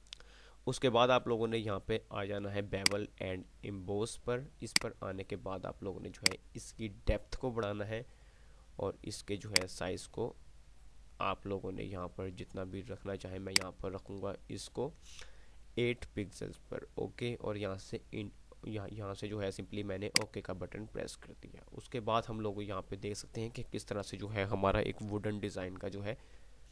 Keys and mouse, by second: 3.0-8.7 drag, 20.2 click.